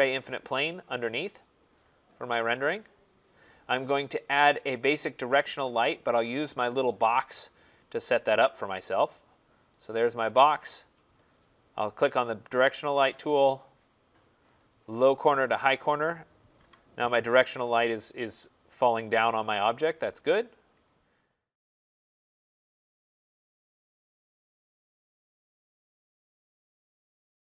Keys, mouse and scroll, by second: 0.3 click, 1.7 right click, 2.0-2.8 scroll, 6.2 middle click, 6.4 click, 7.3 click, 8.6 click, 9.7 click, 11.2 click, 12.9 click, 13.3 click, 14.4 click, 15.8 click, 16.5 Delete, 18.1 right click, 18.2 middle click, 18.3-19.0 scroll, 20.6 middle click, 20.7 right click.